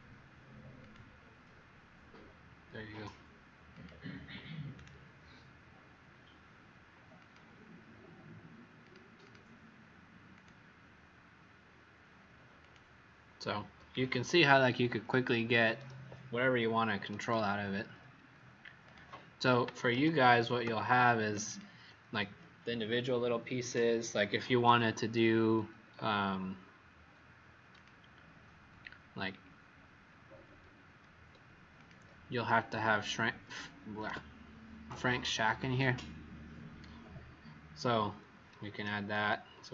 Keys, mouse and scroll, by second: 4.7 right click, 7.1 click, 9.1 click, 10.3 click, 14.0-14.8 alt+scroll down 2, 17.1 right click, 18.8 click, 19.9 ctrl+z, 21.4 click, 29.0-30.0 alt+scroll down 1, 30.0 alt+scroll up 1, 31.7 click, 32.4 scroll up 1, 34.0 w, 35.7-37.3 scroll up 1, 39.1 click, 39.6 shift+click.